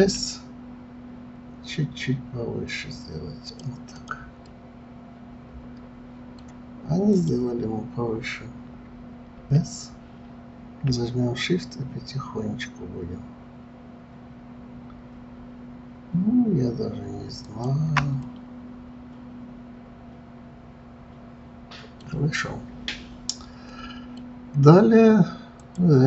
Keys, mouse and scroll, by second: 0.0 s, 3.9 click, 4.4-7.1 middle drag, 7.1 click, 9.3 s, 18.2-21.3 middle drag, 22.9-25.6 middle drag, 25.6 click.